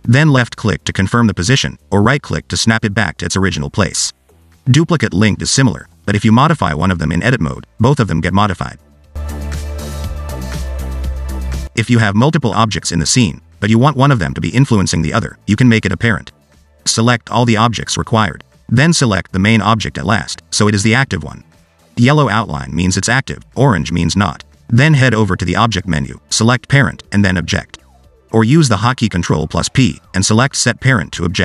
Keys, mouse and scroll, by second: 0.5 click, 2.4-3.6 scroll down 1, 3.6 click, 5.6 scroll down 2, 6.4 Tab, 7.0 g, 8.6 ctrl+z, 8.8 ctrl+z, 9.1 ctrl+z, 13.0 shift+d, 14.4 shift+d, 16.2 scroll down 1, 18.1 shift+click, 18.8 shift+click, 21.5 shift+click, 26.3 click, 30.1 ctrl+p.